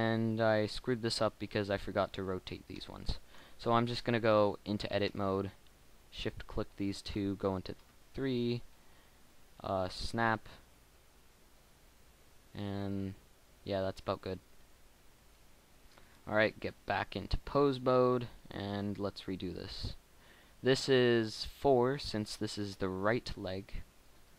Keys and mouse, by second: 1.8-3.0 middle drag, 3.0-5.7 drag, 4.2 Tab, 5.8-7.7 drag, 7.7 KP_3, 10.8 r, 12.1 r, 16.1 Tab, 17.7-19.9 right drag, 19.9 middle click, 22.0 middle click.